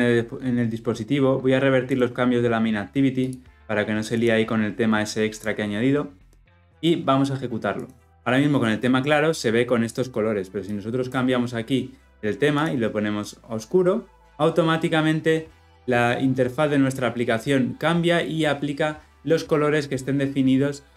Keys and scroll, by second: 4.2 ctrl+alt+z, 7.7 shift+F10.